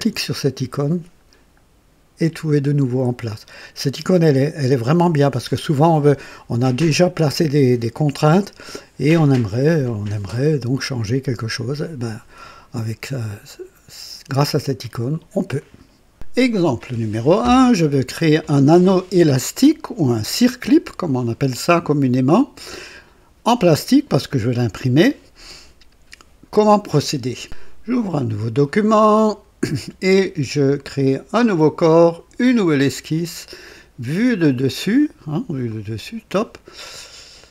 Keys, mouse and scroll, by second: 20.2-22.8 drag, 27.4 click, 28.8 click, 31.3 click, 32.4 click, 34.3 click, 35.6 click.